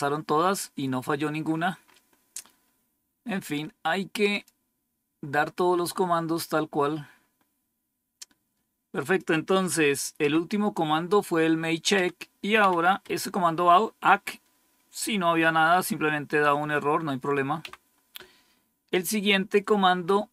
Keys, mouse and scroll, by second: 1.1-1.9 scroll down 5, 4.2 click, 6.4-9.0 scroll down 1, 9.0 click, 9.7 Up, 10.1 Up, 11.9 Down, 12.5 Down, 13.0 Up, 17.5 Down.